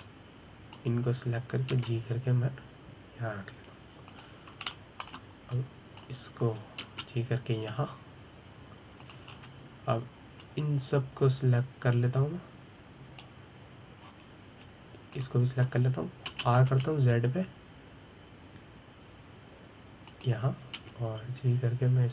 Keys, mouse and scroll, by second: 0.0 click, 0.5-1.7 shift+middle drag, 1.7 click, 3.4 g, 6.4-7.2 shift+middle drag, 7.2 click, 8.5 g, 10.8 click, 11.0-11.7 scroll down 4, 11.7-12.1 scroll down 1, 12.1 click, 15.7-16.8 scroll up 4, 16.8 shift+click, 18.0 r.